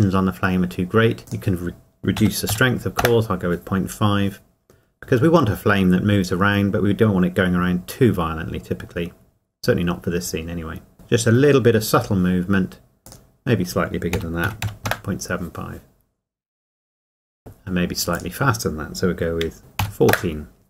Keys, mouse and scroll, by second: 1.2 click, 2.2 KP_Decimal, 5.1 KP_Enter, 13.0 click, 14.1 KP_Decimal, 15.0 KP_Enter, 18.1 click, 19.6 BackSpace.